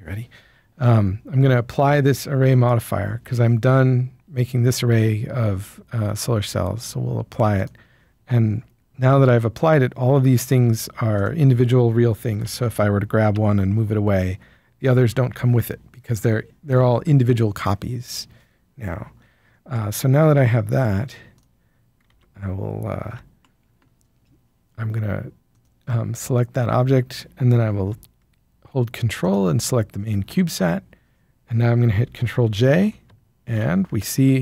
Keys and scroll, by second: 9.1 Tab, 12.3 ctrl+l, 13.2 g, 15.2 Escape, 22.1 alt+a, 23.1 Tab, 33.5 ctrl+j.